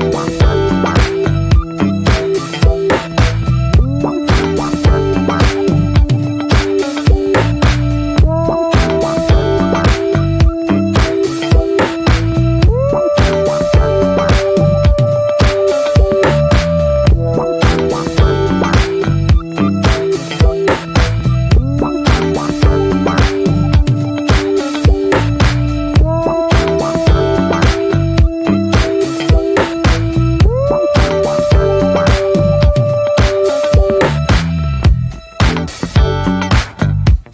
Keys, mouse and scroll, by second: 0.2 middle click, 0.5 click, 0.7 middle click, 0.9 click, 1.2 scroll down 2, 1.3 middle click, 1.5 click, 1.7 middle click, 1.9 click, 2.2 middle click, 2.4 click, 2.6 middle click, 2.8 click, 3.3 middle click, 3.5 click, 3.8 middle click, 4.0 click, 4.4 middle click, 4.5 click, 5.0 middle click, 5.2 click, 5.6 middle click, 5.7 click, 6.1 middle click, 6.4 click, 6.8 middle click, 7.0 click, 7.6 middle click, 7.8 click, 8.2 middle click, 8.4 click, 8.8 middle click, 9.1 click, 9.2 shift+middle click, 9.6 click, 10.1 middle click, 10.6 click, 10.8 shift+middle click, 11.0 scroll up 1, 11.2 click, 11.4 middle click, 11.6 click, 12.0 middle click, 12.2 click, 12.7 middle click, 12.9 click, 13.1 middle click, 13.3 click, 13.7 shift+middle click, 14.0 click, 14.2 middle click, 14.4 click, 14.8 shift+middle click, 15.2-16.5 drag, 16.5 scroll down 1, 16.7-18.2 scroll up 2, 16.9 shift+middle click, 18.2 shift+middle click, 18.4 scroll up 1, 18.7 click, 19.1 middle click, 19.4 f, 19.9 click, 20.4 middle click, 20.7 click, 21.5 middle click, 21.7 click, 22.1 middle click, 22.5 click, 23.2 middle click, 23.5 click, 24.2 middle click, 24.4 scroll up 1, 24.7 click, 25.2 scroll down 2, 25.3 middle click, 25.8 click, 26.6 middle click, 26.8 click, 27.3 shift+middle click, 27.6 click, 28.1 middle click, 28.2 scroll up 1, 28.5 click, 28.9 middle click, 29.2 click, 29.7 middle click, 30.0 click, 30.4 middle click, 30.7 click, 31.2 middle click, 31.4 scroll up 1, 31.6 click, 31.9 scroll down 2, 32.0 middle click, 32.2 click, 32.6 middle click, 33.0 shift+click, 33.5 scroll down 2, 33.6 shift+middle click, 34.0 scroll up 1, 34.1 shift+middle click, 34.5 click, 35.0 shift+middle click, 35.4 click, 35.8 middle click, 36.1 click, 36.8-37.3 middle drag.